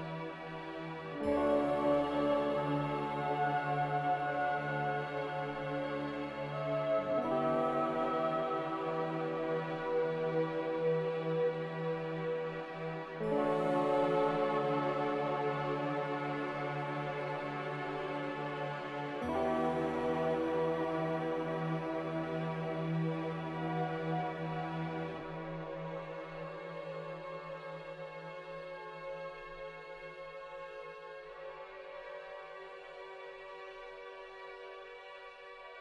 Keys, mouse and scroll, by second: 1.0-1.9 typing, 2.3 ctrl+z, 4.4-5.4 typing, 6.5 click, 13.4 a, 15.4 z, 20.3-21.2 typing, 23.6 a, 27.8-29.8 typing, 31.7-33.2 typing.